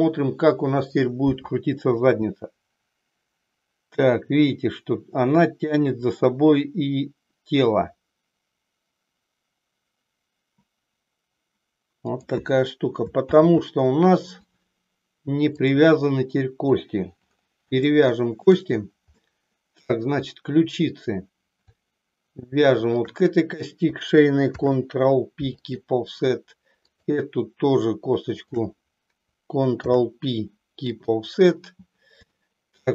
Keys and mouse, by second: 2.2 r, 12.3 click, 13.6 ctrl+z, 15.6-17.1 drag, 17.9 shift+middle click, 19.3 middle click, 20.3 click, 24.5 ctrl+p, 26.9 click, 28.4 shift+click, 29.9 ctrl+p, 32.4-32.9 shift+middle drag.